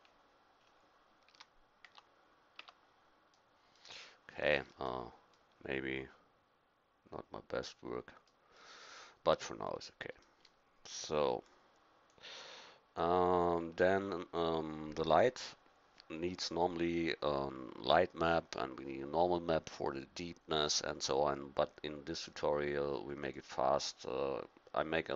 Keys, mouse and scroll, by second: 1.3 a, 1.8 Tab, 2.6 Tab, 11.1-15.2 drag, 23.2-25.1 drag.